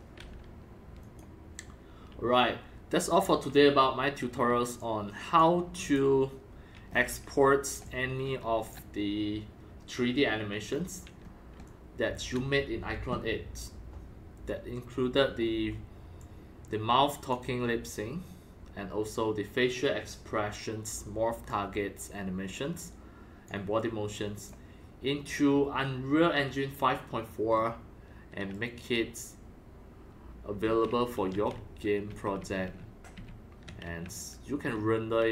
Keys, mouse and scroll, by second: 1.0-2.3 drag, 4.7 click, 5.8 click, 6.8 scroll down 7, 7.5-8.7 typing, 7.8-8.3 drag, 8.7-10.3 drag, 10.6 scroll, 10.7 scroll up 1, 10.7 scroll, 11.0 scroll, 11.5-12.5 typing, 11.6 click, 13.9 click, 16.1-17.3 drag, 19.6-23.4 drag, 24.3 click, 27.5-28.1 scroll up 5, 28.5-29.8 right drag, 29.9 right click, 29.9 scroll, 30.3-30.6 scroll down 5, 30.3-35.3 typing, 33.1 right click, 33.3 right click, 34.1-35.3 right drag.